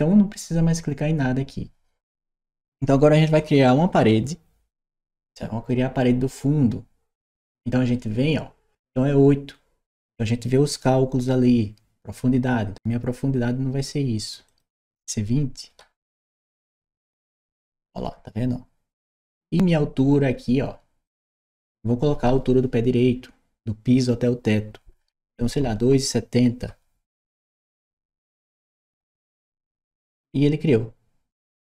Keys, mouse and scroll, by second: 14.3 click, 15.6 2, 16.1 0, 16.7 Return, 20.9 click, 26.5 2, 27.0 7, 27.8 0.